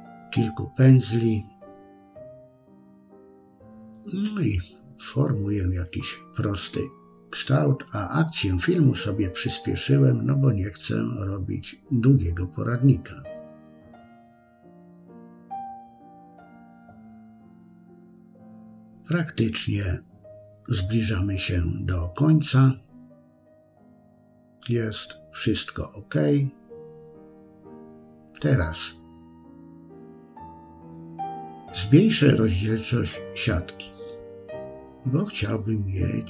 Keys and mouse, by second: 0.2 shift+click, 0.8 KP_3, 1.3 ctrl+z, 1.6 middle click, 2.5 click, 2.9 click, 3.8 middle click, 4.1 middle click, 4.7 click, 5.9 ctrl+r, 6.2 middle click, 7.2 middle click, 7.9 KP_3, 8.1 shift+middle click, 8.8-10.3 drag, 10.5-11.8 middle drag, 12.0 KP_3, 13.1 ctrl+click, 13.7 ctrl+z, 14.5 click, 15.0 click, 15.5 middle click, 16.0 shift+click, 18.1 click, 18.4 click, 19.3 ctrl+r, 19.6-21.5 middle drag, 21.8 KP_1, 22.5 click, 23.0-24.0 middle drag, 24.2-25.7 middle drag, 27.6-36.2 drag, 30.7 BackSpace, 30.8 BackSpace.